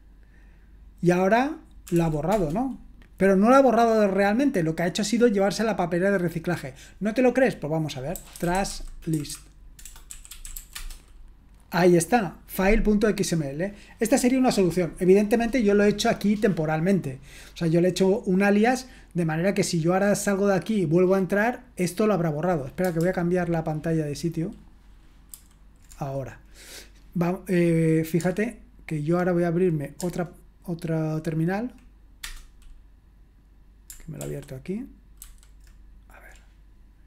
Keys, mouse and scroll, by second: 1.6-2.4 typing, 7.9-11.1 typing, 25.5 super+h, 32.2 super+Return, 34.2 super+l, 35.2 super+h.